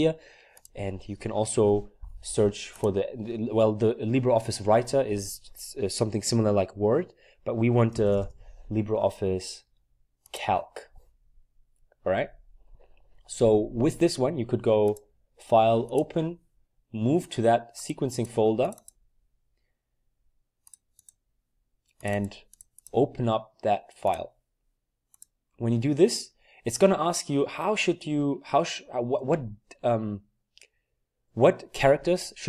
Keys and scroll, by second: 7.8-8.8 typing.